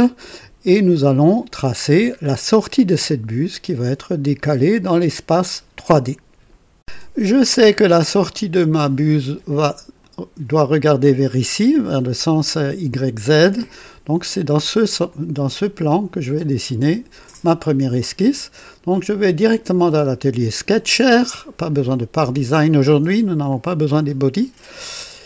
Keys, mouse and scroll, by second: 0.7 click, 1.9 scroll down 2, 3.1 click, 4.9 click, 7.2-9.2 drag, 10.0 click, 15.0 right click, 15.8 click, 16.6 right click, 18.8 click, 20.3 click, 21.9 click, 22.8 right click, 23.4-24.9 drag.